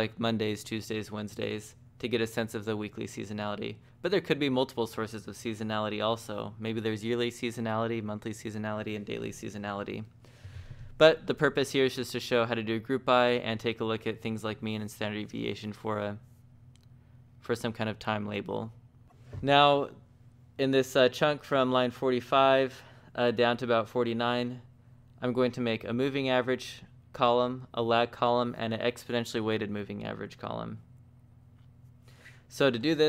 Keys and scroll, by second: 5.3 shift+v.